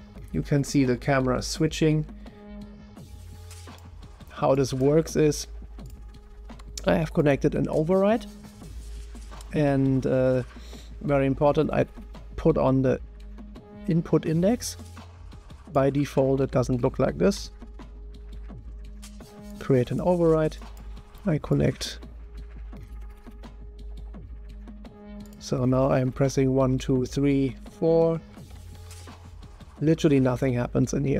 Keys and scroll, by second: 0.0-1.6 typing, 3.7-4.4 typing, 5.8-6.5 typing, 16.4 Tab, 17.3-18.1 typing, 19.2-20.0 typing, 26.2-28.9 typing.